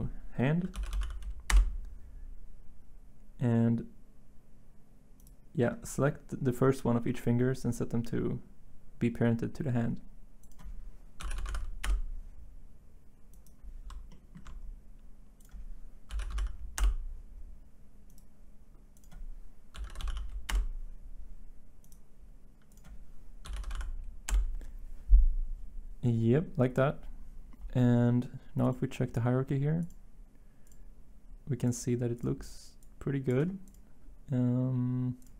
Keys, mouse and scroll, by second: 0.7-2.0 typing, 11.2 typing, 11.8 Return, 14.1-14.8 typing, 15.8-16.8 typing, 19.5-21.8 typing, 20.5 Return, 23.2-23.9 typing, 24.3 Return.